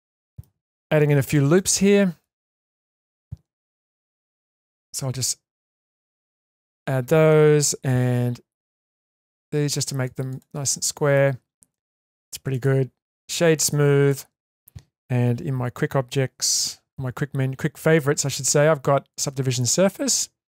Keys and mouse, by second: 1.6-2.2 middle drag, 2.5-3.1 alt+middle drag, 3.9 ctrl+r, 7.9 ctrl+r, 10.7-11.1 middle drag, 11.4 Tab, 11.7-12.3 middle drag, 12.5-13.3 right drag, 13.6-14.1 middle drag, 16.5 q, 19.5-20.5 middle drag.